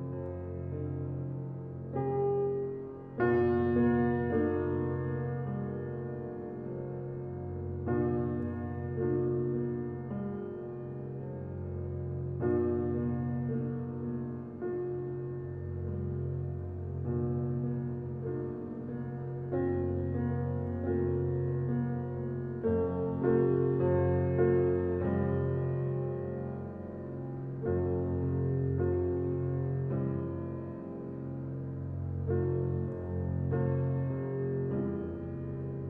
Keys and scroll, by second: 32.5 ctrl+i.